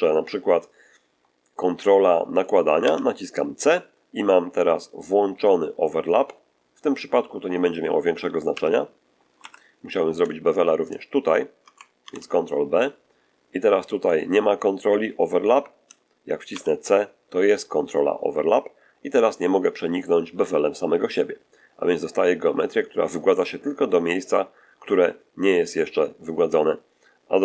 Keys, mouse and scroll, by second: 2.7 c, 8.4 c, 9.3 Escape, 10.8 shift+right click, 11.9 ctrl+shift+b, 16.4 c.